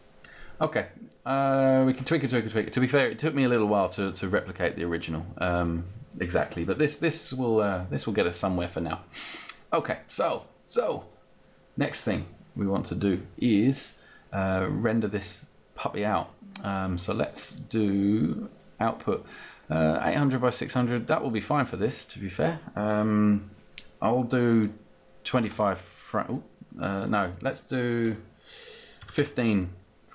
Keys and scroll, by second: 25.3 Down, 25.6 5, 28.7 End, 29.3 5.